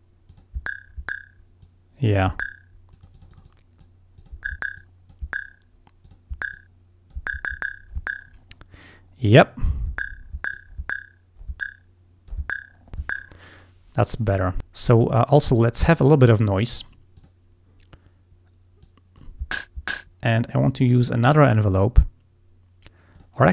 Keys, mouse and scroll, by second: 0.3 click, 1.7 click, 3.0-4.1 drag, 4.3 click, 4.8 click, 6.1 click, 6.6 click, 9.3 click, 10.6-12.8 drag, 17.2 click, 18.9 click, 20.9 click, 23.2 click.